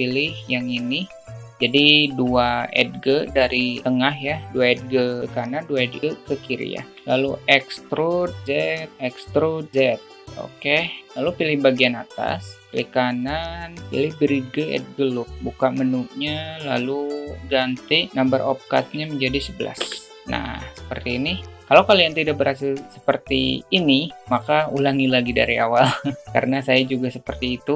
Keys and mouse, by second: 0.3 click, 8.0 e, 9.3 e, 10.5 a, 11.5 click, 15.4 right click, 17.2 right click, 17.5-20.1 right drag, 19.6 1, 20.1 click, 20.4 right click, 21.7 alt+z, 22.6 alt+middle click, 25.1 alt+middle click, 26.1 shift+middle click.